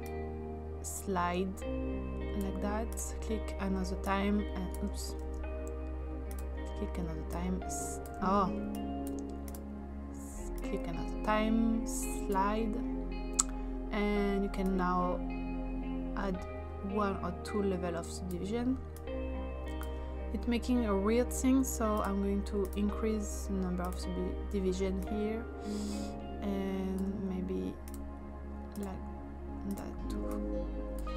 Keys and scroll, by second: 5.2 ctrl+z.